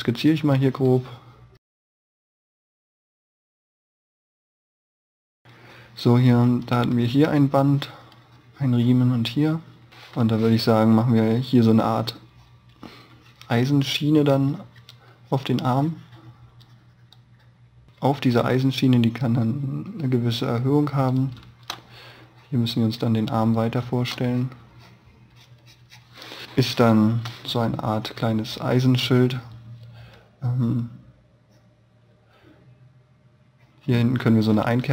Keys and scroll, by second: 2.1 space, 3.0 e, 3.4 b, 4.8 e, 5.2 b, 21.2 space, 22.0 space, 26.7 space.